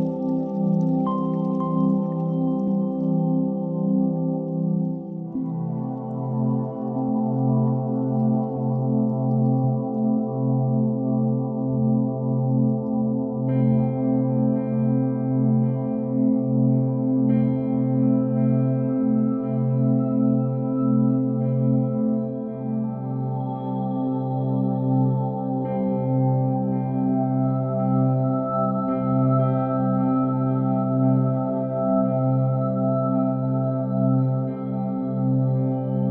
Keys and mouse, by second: 0.6 s, 2.6 g, 5.9-6.7 middle drag, 7.1-7.4 middle drag, 8.9-10.0 drag, 10.3 middle click, 11.6-12.0 middle drag, 15.8-16.4 middle drag, 16.7 shift+a, 24.0 r, 28.4 g, 29.6 s, 31.0 KP_3, 32.0-32.3 shift+middle drag, 32.8 g, 34.3-34.8 middle drag, 35.8 KP_7.